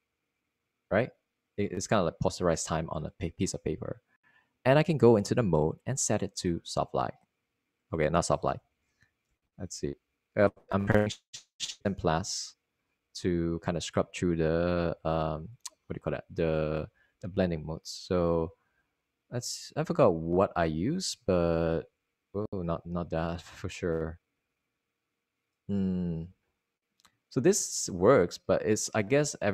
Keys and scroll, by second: 1.1 super+z, 10.7-11.9 typing, 13.7 typing, 14.9-19.7 typing, 23.7-25.3 typing, 27.6 _.